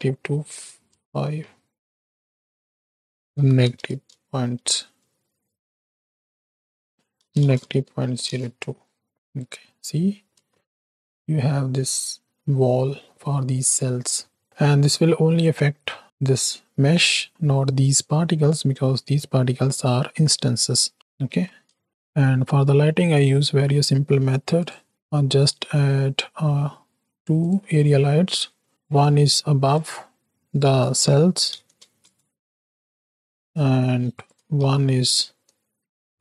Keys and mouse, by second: 2.6-8.3 drag, 3.8 KP_0, 5.8 BackSpace, 5.9 BackSpace, 9.3 middle click, 10.5-10.9 shift+middle drag, 14.0 shift+middle click, 16.0 z, 17.3 z, 18.7 middle click, 20.7 shift+drag, 21.3 alt+a, 21.8 shift+click, 24.9 shift+a, 27.7 shift+drag, 28.7 shift+a, 28.9 click, 30.7-32.1 drag, 33.3 s, 34.6 shift+d, 36.1 alt+g.